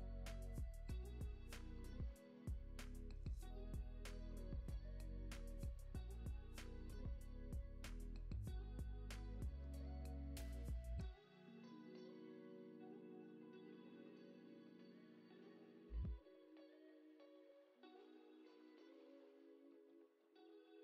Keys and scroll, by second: 3.1 space, 6.7 super+Down, 11.6 space, 13.2 space, 13.5 super+s, 18.5 super+Up, 19.8 super+Down.